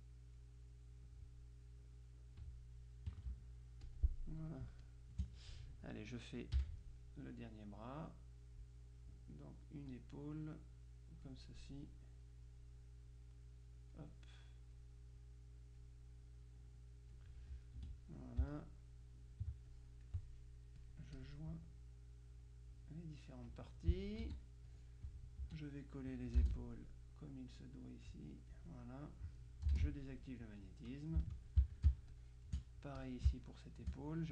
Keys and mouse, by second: 1.7-2.9 drag, 3.2 KP_Subtract, 3.9 click, 4.7 space, 4.9 click, 6.7 F6, 9.4-10.5 drag, 10.9-12.0 drag, 11.6 right click, 12.5-14.5 drag, 17.9 F2, 18.6 shift+click, 19.8 click, 20.9 click, 22.4-23.4 drag, 24.3 z, 24.8 click, 25.5 F2, 27.3-29.1 drag, 30.6-32.3 drag, 32.0 ctrl+space, 33.0 click, 33.4 space.